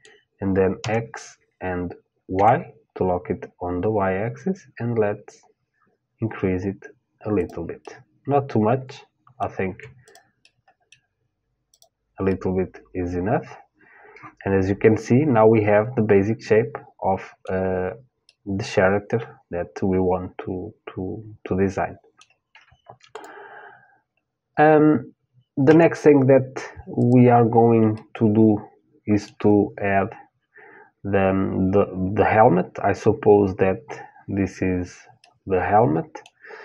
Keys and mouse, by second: 0.4 s, 7.4-9.4 middle drag, 9.3 Tab, 9.6-13.3 drag, 10.0-12.5 middle drag, 12.8-14.0 middle drag, 17.9-20.9 middle drag, 22.7-24.7 drag, 25.3 Tab, 26.6 click, 27.6-36.6 middle drag.